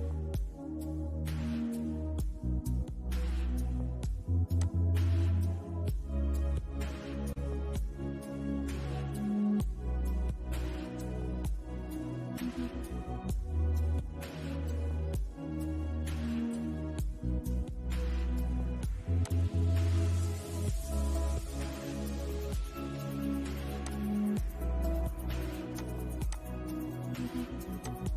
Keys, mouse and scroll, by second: 0.1-1.6 shift+middle drag, 1.6-2.0 scroll down 1, 2.0-3.8 middle drag, 3.8 click, 6.5-9.8 shift+middle drag, 17.2 shift+middle click, 18.4 click, 23.0 click.